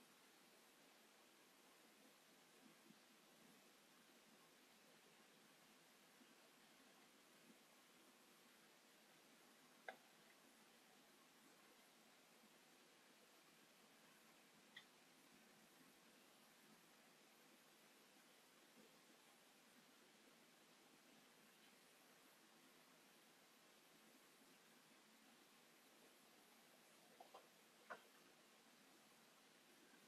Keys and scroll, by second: 1.7 space, 6.5 space, 9.9 6, 10.0 Return, 11.2 p, 18.1 space, 19.0 p, 21.9 space, 28.6 Delete.